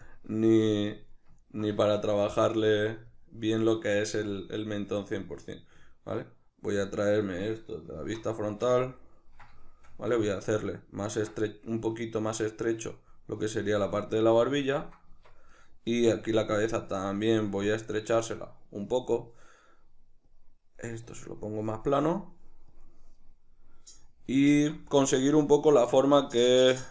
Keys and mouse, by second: 0.1-1.4 drag, 1.4-2.6 ctrl+middle drag, 2.6-4.8 drag, 4.8-6.8 middle drag, 6.8-8.5 drag, 8.0 alt+q, 8.5-12.3 shift+middle drag, 12.3-15.5 drag, 15.1 Tab, 15.5 right click, 15.9 Tab, 16.5-25.2 drag, 24.5 alt+q, 25.2-26.9 middle drag.